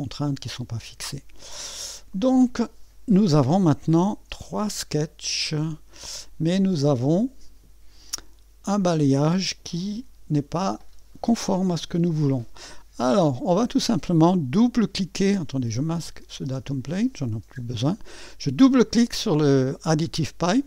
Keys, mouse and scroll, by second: 0.4 click, 2.1 click, 4.1 click, 4.4 space, 5.3 click, 6.0-8.0 drag, 8.7 click, 9.2 space, 11.7 space, 16.0 click, 16.5 space.